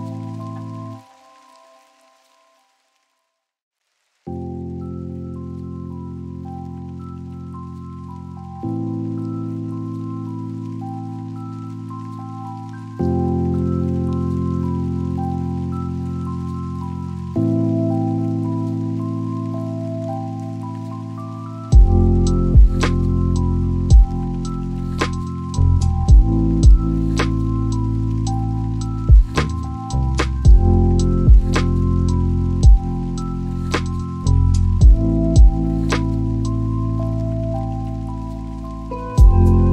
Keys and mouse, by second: 7.0-9.5 drag, 15.3 click, 17.0 click, 18.8 click, 22.1 click, 24.0 click, 26.0-27.6 drag, 30.5 click, 31.2 KP_Decimal, 39.5-39.7 drag.